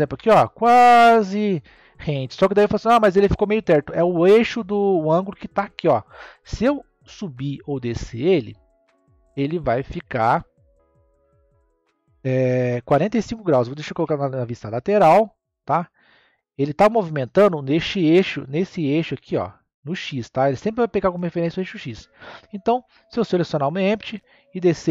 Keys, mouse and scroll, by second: 4.9 click, 6.1 click, 13.9 KP_3, 16.0 click, 18.4 click, 22.1 click, 22.7 click, 24.0 click.